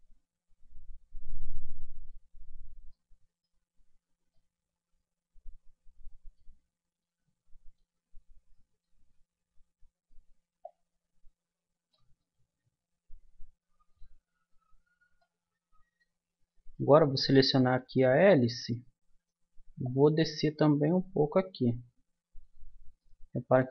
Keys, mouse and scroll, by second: 2.4-6.8 middle drag, 3.6 Tab, 7.0-8.6 middle drag, 9.1 Tab, 12.3-14.0 middle drag, 14.5 Tab, 15.2 middle click, 17.3 click, 18.0-19.8 middle drag, 19.8 click, 21.9-23.0 middle drag, 22.5 Tab, 23.1 middle click.